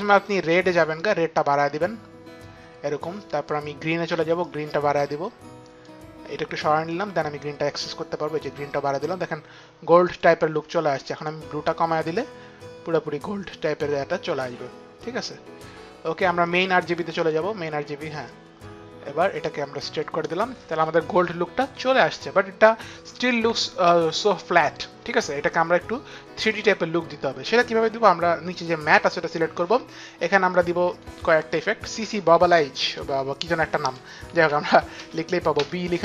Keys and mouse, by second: 0.0 click, 1.6 click, 4.5 click, 6.8 click, 11.1 click, 17.1 click, 18.2 click, 26.4 click, 28.9 click, 33.5-35.5 typing.